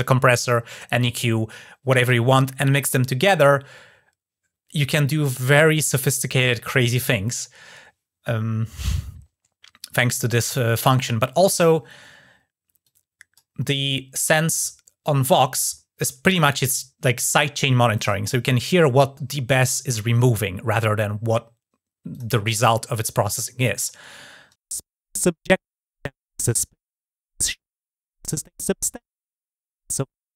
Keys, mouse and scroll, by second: 12.6 click, 21.9 click.